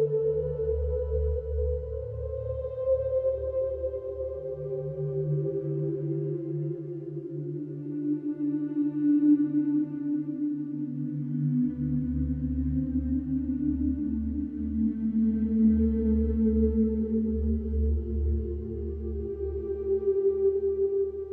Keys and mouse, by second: 2.3 shift+a, 4.0 KP_1, 6.9 s, 7.2 z, 8.6 Tab, 13.1 middle click, 13.3 Tab, 13.8 s, 13.9 x.